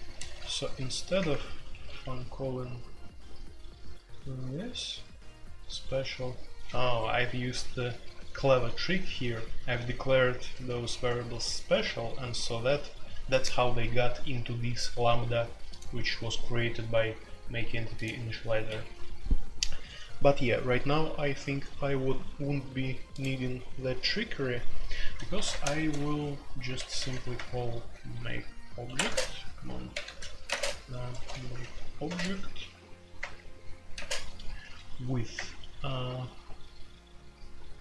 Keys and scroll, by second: 0.0-37.8 typing, 1.2 Return, 1.3 Return, 1.7 Escape, 6.8 Escape, 18.6 Escape, 28.8 Escape, 29.0 Tab.